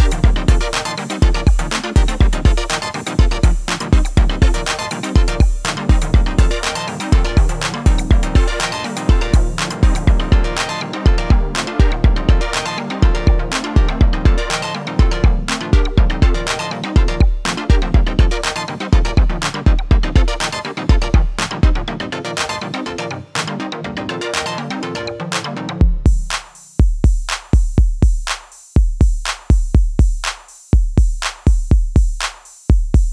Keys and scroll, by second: 2.5 ctrl+-, 27.9 F10, 27.9 F9, 28.2 F10.